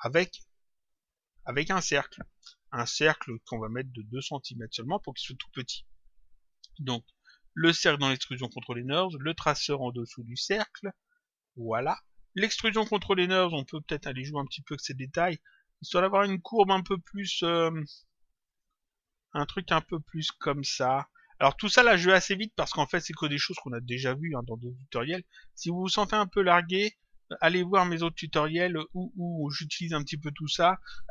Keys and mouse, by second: 0.1 click, 3.3 click, 4.4 click, 6.5 click, 9.1 click, 12.3 click, 14.7 click, 17.3 click, 20.5 click, 24.0 click, 26.5 click, 28.0 click.